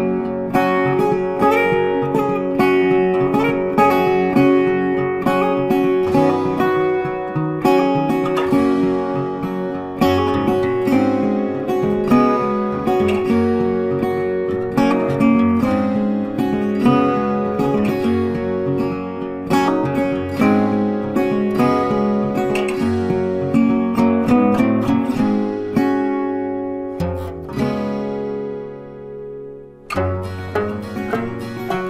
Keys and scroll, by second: 2.4 Delete, 5.3 ctrl+d, 10.4 ctrl+t.